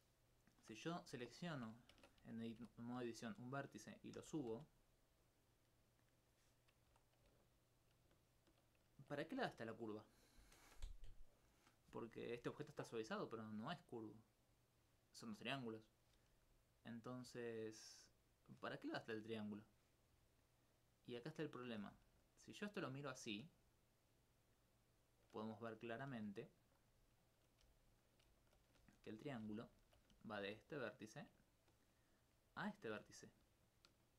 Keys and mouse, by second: 0.6 Tab, 1.9 ctrl+Tab, 2.6 ctrl+1, 3.4 right click, 4.2 g, 4.5 z, 6.2-7.3 drag, 7.4 alt+click, 8.1 alt+s, 13.1 d, 13.4 click, 13.5 d, 16.9 d, 18.3 d, 19.6 right click, 22.3 alt+click, 22.5 alt+click, 23.5 alt+s, 26.4 right click, 27.6 right click, 27.7 right click, 28.4 alt+click, 28.8 alt+click, 29.6 alt+click, 30.6 alt+click, 30.7 click, 31.5 ctrl+click, 31.6 ctrl+click, 33.2 alt+click, 33.4 alt+click.